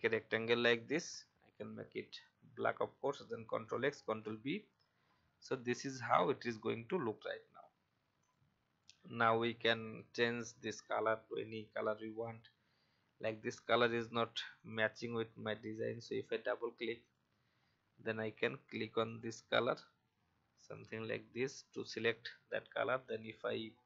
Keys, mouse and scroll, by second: 3.4 ctrl+x, 5.9 alt+scroll up 1, 7.8 v, 8.2-23.8 drag.